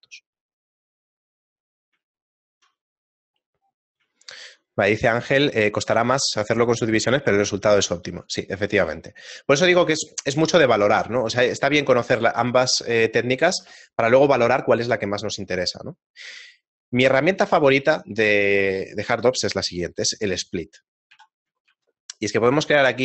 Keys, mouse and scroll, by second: 1.2 click, 2.2 shift+middle click, 2.9 middle click, 3.5-3.9 scroll down 1, 3.9 middle click, 4.3 shift+middle click, 8.4 right click, 8.8 a, 9.2 shift+middle click, 21.2 KP_1, 21.7 shift+a.